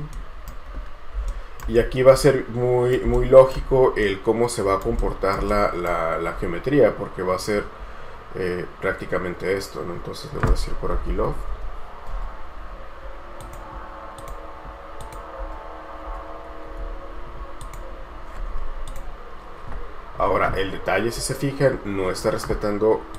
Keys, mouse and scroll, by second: 0.3 right click, 1.5 shift+right click, 2.0-2.3 scroll up 1, 2.3 right click, 3.9 scroll down 1, 6.5 scroll down 1, 10.9-12.2 typing, 18.2-19.0 scroll up 1, 19.1 typing, 21.3-21.9 scroll down 1, 21.9-22.6 scroll up 1, 22.6 typing.